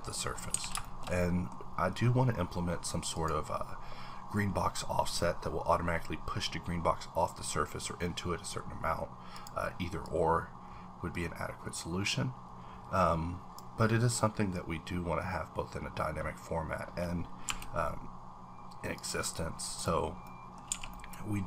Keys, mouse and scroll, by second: 0.3-1.0 scroll down 7, 0.5 a, 0.8 shift+middle click, 1.2 shift+middle click, 1.6-2.7 scroll up 1, 3.2 click, 9.3 click, 10.0-18.9 drag, 17.5 b, 19.6 click, 20.2 middle click, 20.6 scroll down 1, 20.7 a, 20.9 middle click.